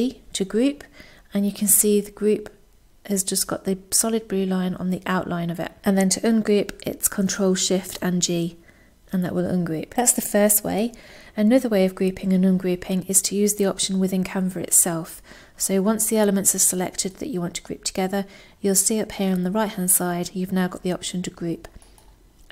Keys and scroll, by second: 6.4 ctrl+shift+g.